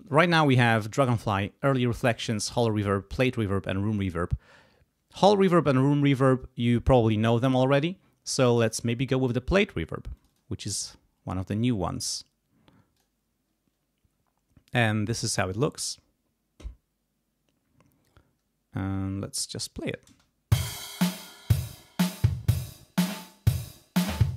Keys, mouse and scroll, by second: 0.0 click, 10.1 click, 12.9 click, 14.6 click, 16.3 scroll down 2, 16.9 scroll down 2, 17.6 scroll up 2, 18.9-20.0 drag, 20.0 space, 22.7-24.3 drag.